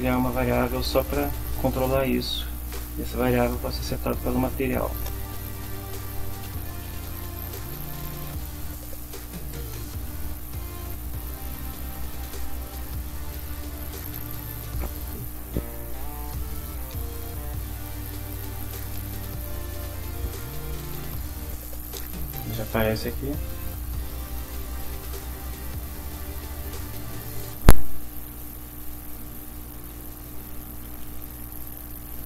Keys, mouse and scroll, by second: 6.0-13.7 typing, 20.3 click, 21.0 click, 24.6-25.8 drag, 25.8 Return, 30.3-32.2 typing.